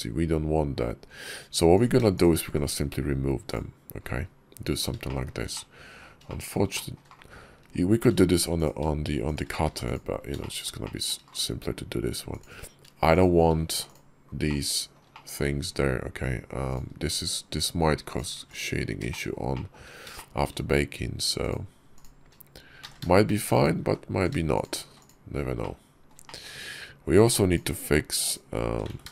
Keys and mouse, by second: 0.9 Tab, 1.6 click, 2.0 shift+click, 2.3 x, 4.9 shift+click, 5.4 middle click, 6.1 shift+click, 6.6 shift+click, 9.5 x, 10.3 shift+click, 10.7 shift+click, 13.0 shift+click, 13.5 x, 14.3 click, 15.0 shift+click, 15.5 middle click, 18.5 x, 18.9 shift+click, 19.4 shift+click, 20.0 shift+click, 21.3 click, 21.8 shift+click, 22.7 z, 23.8 ctrl+z, 24.7 x, 25.4 click, 26.1 shift+click, 27.3 click, 28.8 ctrl+z.